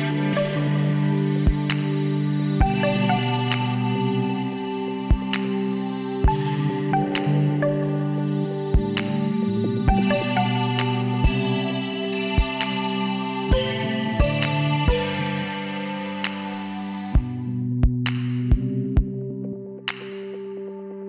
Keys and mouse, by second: 4.4-6.1 drag, 7.0-8.9 drag, 7.9 l, 9.1 shift+d, 14.0 z, 14.3-15.4 drag, 16.2 middle click, 18.7 middle click, 20.4 middle click.